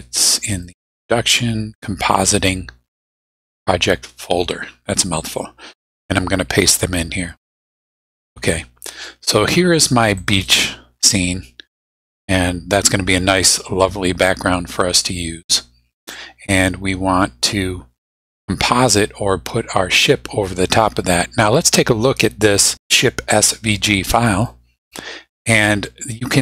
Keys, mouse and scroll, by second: 0.5 click, 2.1 click, 5.2 middle click, 7.2 click, 8.1 click, 10.2 click, 16.4 click, 24.2 click.